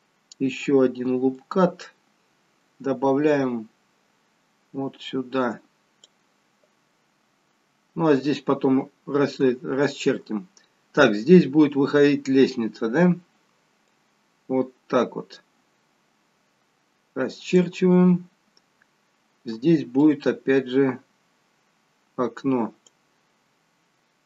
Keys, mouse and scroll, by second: 1.5 click, 13.8 click, 19.9 click.